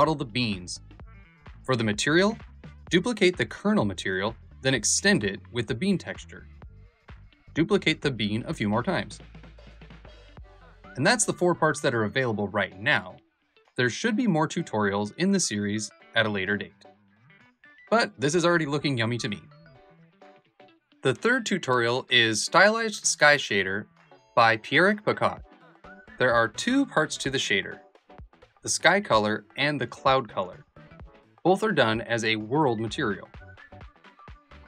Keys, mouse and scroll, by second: 1.3 middle click, 2.0 shift+middle click, 2.7 Tab, 2.7-5.2 drag, 5.7 middle click, 6.4 middle click, 7.0 KP_0, 7.0 g, 8.9 r, 10.5 g, 11.1 g, 12.8 r, 13.7 g, 15.2 r, 16.3 g, 17.7 g.